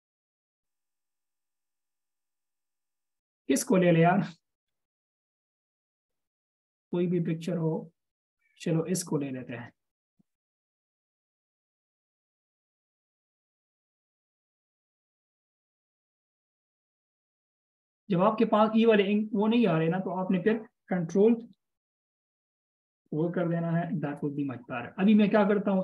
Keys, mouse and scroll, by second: 3.2-3.6 scroll down 1, 3.8 scroll down 1, 4.6 scroll down 1, 14.8 alt+shift+scroll down 1, 23.4 alt+shift+scroll down 1.